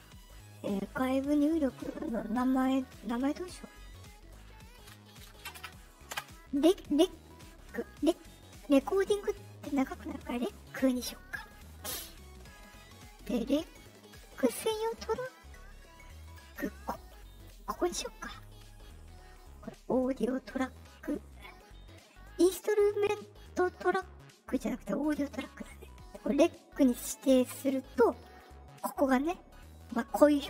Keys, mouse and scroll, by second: 5.5 Return, 13.1-14.7 drag, 16.1 click, 17.3 right click, 27.4 click.